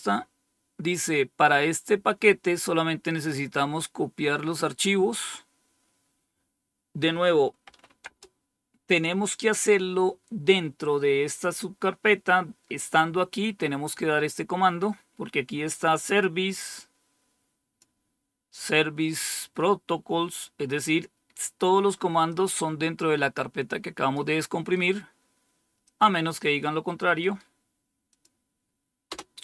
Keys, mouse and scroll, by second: 7.5-8.3 typing, 16.5-17.7 drag, 22.2-24.1 drag, 25.7 click, 28.0 click, 29.0 Return.